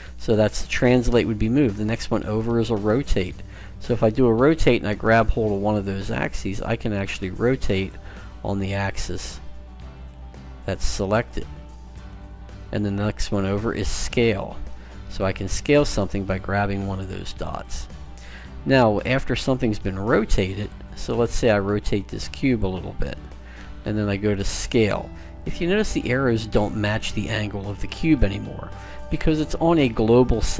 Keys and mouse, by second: 1.8-3.2 drag, 3.2 middle click, 4.5 middle click, 4.8 click, 6.1 middle click, 6.8-8.3 drag, 8.3-9.9 middle drag, 10.0-11.2 drag, 11.2 middle click, 13.5-18.2 drag, 20.4-23.5 drag, 24.2 click, 24.9-26.1 middle drag, 26.4 middle click.